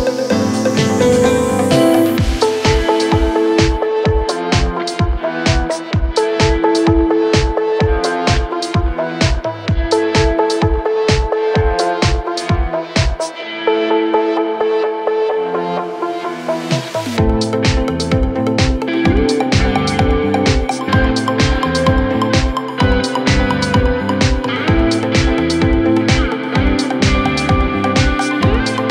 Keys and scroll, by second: 13.9 4, 15.5 3, 25.3 ctrl+z, 27.3 ].